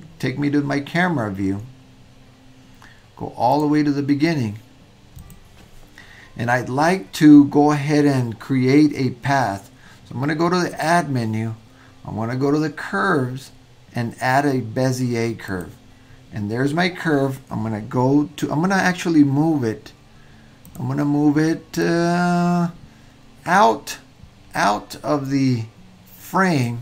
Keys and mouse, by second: 3.6 drag, 10.9-15.8 drag, 20.7 click, 21.8-22.2 drag, 25.1-26.8 middle drag.